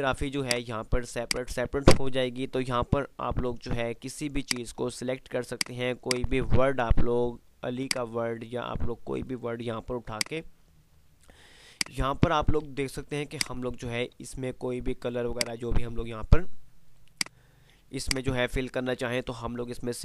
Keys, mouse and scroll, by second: 10.0 F2, 11.8 click, 12.4 F2, 13.2 F2, 13.5 click, 14.2 F3, 16.4 F2, 17.2-20.0 drag.